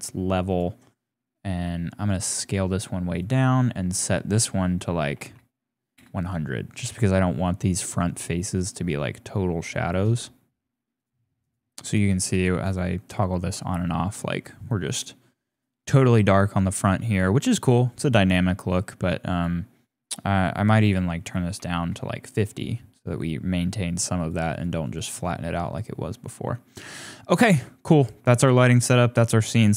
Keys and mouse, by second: 1.6 s, 2.4 s, 2.5 s, 4.0-5.9 drag, 5.2 KP_0, 9.9-10.9 drag, 11.0 click, 11.4 click, 11.9 click, 12.3 click, 13.1 click, 13.5 click, 15.5 click, 18.0 click, 19.3 click, 20.3 click, 20.8 click, 24.2 click, 24.8 click, 26.1-27.4 middle drag, 27.6 middle click, 29.4 click.